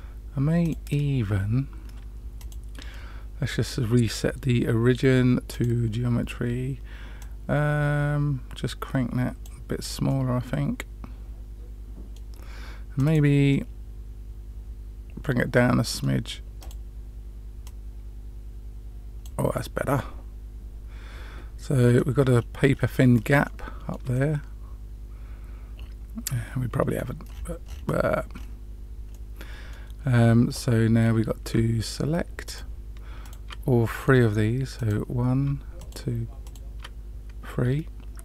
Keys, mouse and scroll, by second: 0.6 click, 2.3-5.6 drag, 7.1-9.4 drag, 10.0-12.1 middle drag, 12.9 click, 13.4-16.0 middle drag, 16.5 click, 17.6 click, 19.5-22.0 middle drag, 22.2-23.3 scroll up 4, 23.4-24.0 shift+middle drag, 24.1-27.0 middle drag, 27.2-27.7 scroll down 4, 27.7 scroll up 1, 28.3-29.1 scroll down 2, 29.1-29.8 middle drag, 30.4-30.7 scroll up 2, 32.4 shift+click, 33.2 shift+click, 34.7 click, 35.7 shift+click, 36.4 shift+click.